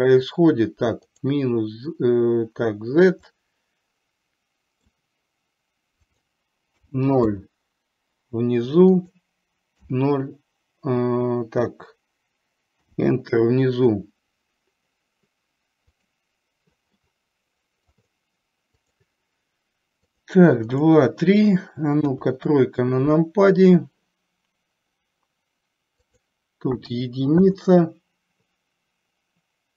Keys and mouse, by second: 3.4-5.0 middle drag, 6.2-7.5 drag, 9.1-13.0 drag, 17.1-18.1 middle drag, 19.0 click, 20.2 click, 22.2 KP_3, 26.4-27.5 drag.